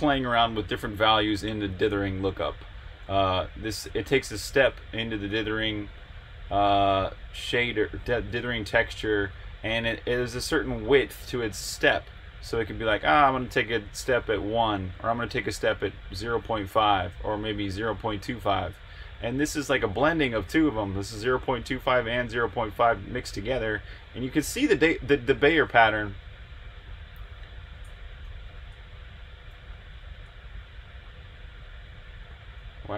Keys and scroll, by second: 28.4 super+r.